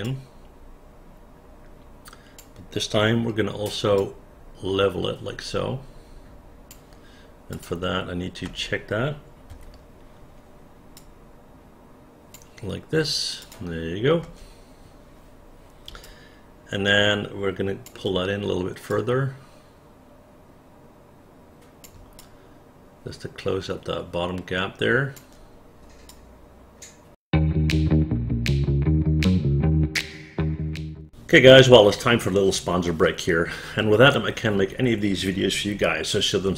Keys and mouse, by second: 0.1-2.5 drag, 4.1-6.8 drag, 7.6 click, 8.5 space, 9.6 f, 11.1-12.4 drag, 13.5 click, 14.3 space, 16.1-17.9 alt+drag, 19.0-21.9 drag, 22.3-25.3 alt+drag, 26.1 click.